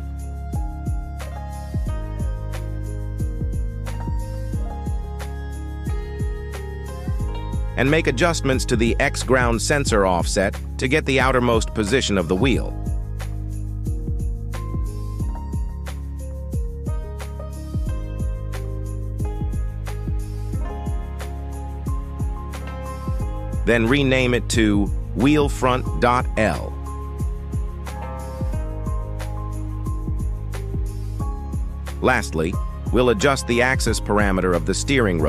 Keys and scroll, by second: 22.4 F2, 25.9 f, 26.3 o, 26.5 n, 26.9 Return.